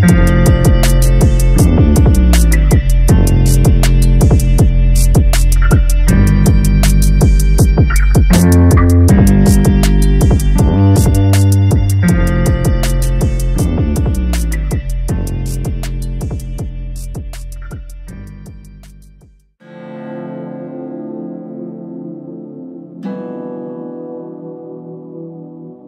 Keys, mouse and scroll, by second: 2.6-4.9 drag, 9.6 Tab, 10.1-10.8 scroll up 3, 10.8 shift+middle click, 11.3-11.9 scroll up 1, 11.9 3, 12.6 click, 14.0 ctrl+KP_Add, 14.8-16.5 scroll down 3, 17.7 click, 18.8-22.9 drag, 23.0 click, 23.6 Tab, 25.1 click.